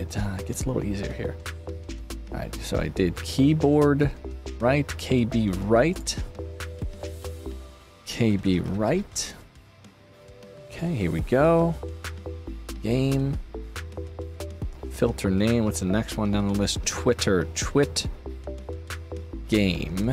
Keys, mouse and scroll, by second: 5.8 click, 6.9 click, 8.2-9.4 typing, 10.5 click, 11.9 click, 13.6 click, 14.2 click, 19.0 click.